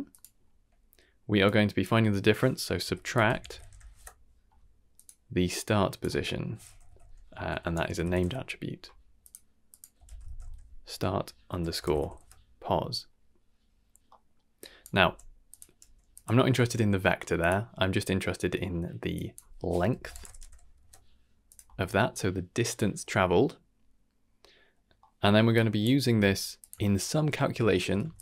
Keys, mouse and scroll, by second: 1.4-5.0 drag, 5.6-9.2 drag, 9.6-12.1 drag, 14.0 middle drag, 14.6 drag, 15.0 g, 15.8 g, 16.3 middle click, 17.0 middle click, 17.4 click, 19.1-21.5 drag, 22.0 g, 24.2 middle click, 25.0 middle click, 25.5 click, 26.1 g, 26.8 shift+middle click, 27.6 shift+middle click, 28.0 g.